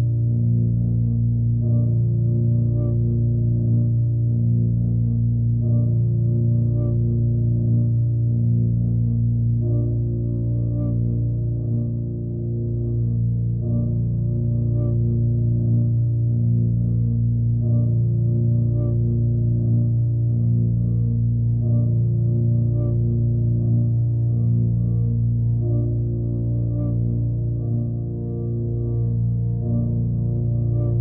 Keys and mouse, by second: 0.1 alt+middle drag, 1.0 m, 5.1 middle click, 6.1-7.0 alt+middle drag, 7.6 drag, 8.4-8.8 drag, 9.1 g, 10.3 ctrl+a, 10.8-12.2 right drag, 12.4 Tab, 12.8 3, 13.6 a, 14.6 a, 15.2 shift+n, 15.5 Tab, 15.9 ctrl+a, 16.3-17.8 right drag, 19.6 click, 20.4 middle click, 20.8-21.4 alt+middle drag, 21.6 click, 23.4 click, 24.4 click, 25.4 click, 26.1-27.2 drag, 27.0 KP_0, 27.9 click, 29.1 click, 30.0-30.7 drag.